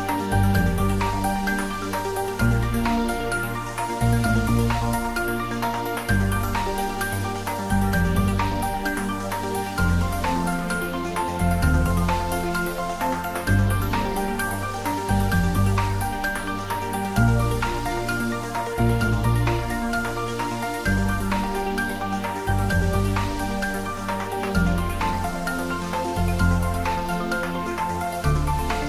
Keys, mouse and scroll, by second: 1.1 click, 5.9-7.8 scroll down 1, 7.8 click, 10.4 scroll up 1, 11.7-15.7 middle drag, 15.7 click, 18.1-19.1 scroll down 2, 19.1-21.4 scroll down 1, 21.4-22.6 scroll down 1, 22.6 click, 27.0 click.